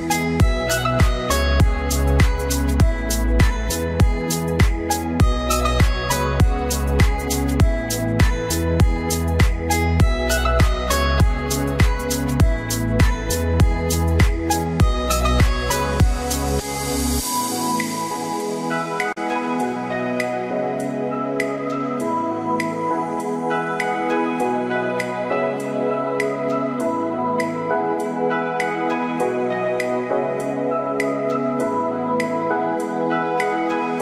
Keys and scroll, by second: 28.5 ctrl+d.